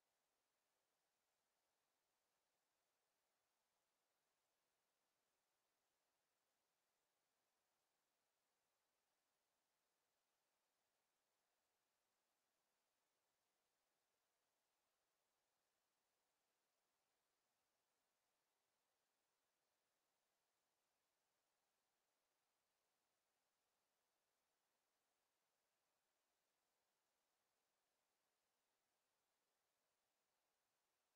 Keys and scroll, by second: 2.6 s, 3.7 w, 4.9 d, 5.5 w, 6.5 a, 7.2 w, 7.9 a, 9.0 Escape.